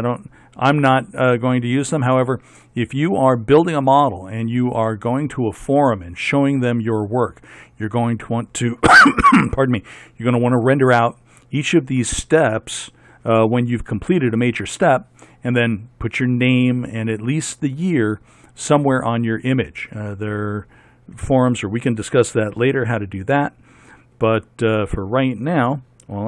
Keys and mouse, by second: 0.0 F11.